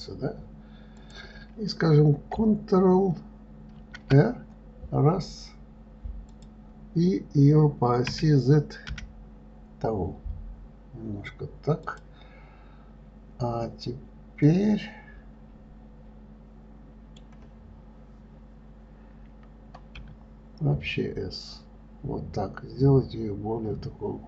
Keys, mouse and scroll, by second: 1.4 click, 4.2 ctrl+r, 14.9-17.9 middle drag, 20.4 s.